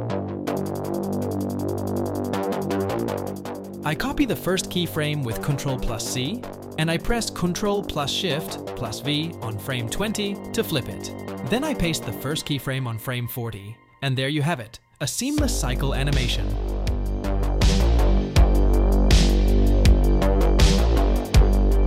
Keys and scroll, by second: 0.4 i, 5.6 ctrl+c, 5.9 ctrl+c, 9.1 ctrl+shift+v, 12.5 ctrl+v, 14.3 space.